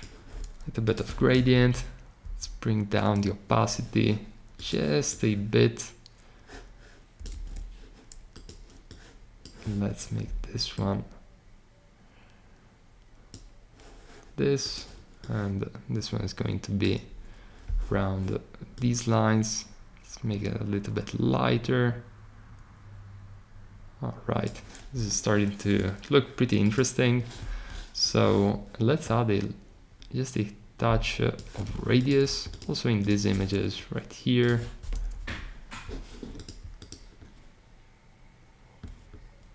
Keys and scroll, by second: 7.2 super+z, 24.9 Escape.